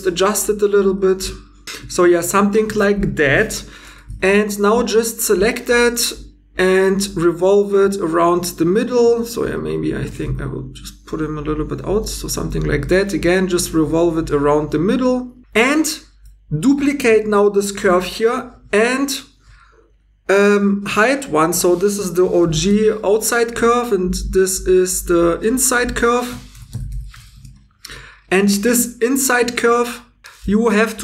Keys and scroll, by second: 1.8 2, 5.2 2, 9.1 ctrl+z, 10.1 1, 12.4 2, 17.7 shift+d, 22.1 shift+o, 22.7 Return, 22.7 shift+g, 26.5 shift+i, 28.7 1.